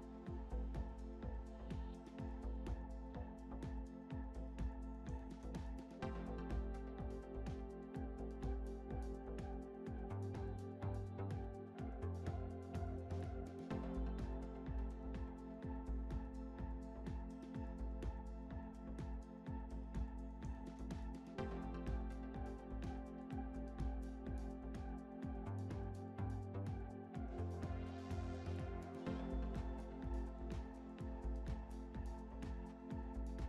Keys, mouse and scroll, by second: 0.1-0.8 middle drag, 0.1 scroll down 6, 0.8 scroll down 1, 1.4 s, 5.5 click, 9.3 scroll up 1, 9.7-11.2 middle drag, 11.2-13.6 drag, 13.6 s, 16.5 click, 19.2 click, 21.2-22.4 scroll down 2, 22.4 click, 23.5-24.2 middle drag, 24.2-24.9 scroll up 4, 24.9-25.5 middle drag, 25.5 click, 26.1 scroll up 1, 27.4-28.5 scroll up 3, 31.7 click.